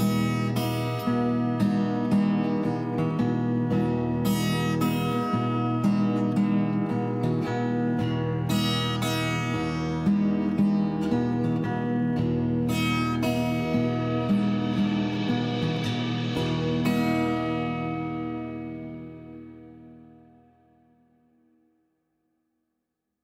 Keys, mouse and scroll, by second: 0.1 click, 1.5 Tab, 2.7 click, 3.5 click, 4.0 Tab, 4.5-5.5 typing, 5.9 Return, 7.7 click, 8.0 click, 8.4 click, 9.0 click, 9.5 click, 11.1 g, 11.4 z, 11.9 z, 12.6 click, 13.0 g, 14.2 click, 14.8 click, 15.1 g, 16.3 click, 16.8 middle click, 17.5 click, 17.9 shift+g, 18.7 click, 19.1 click, 19.5 g, 20.7 click, 21.0 middle click, 22.3 click, 22.8 middle click.